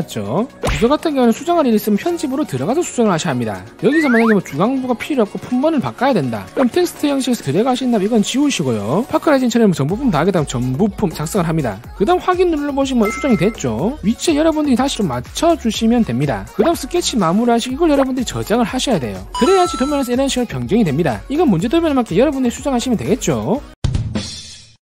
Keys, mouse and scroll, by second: 7.3 click, 10.1-11.9 typing, 12.8 click, 14.3-16.2 drag, 17.5 click, 18.9 click.